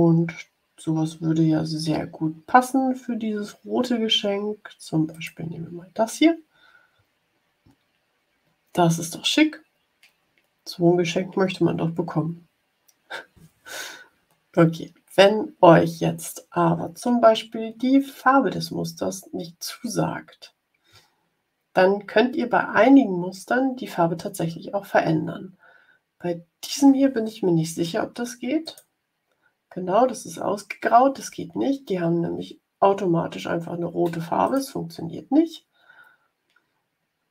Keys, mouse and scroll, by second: 5.0 click, 28.5 click, 34.3 click.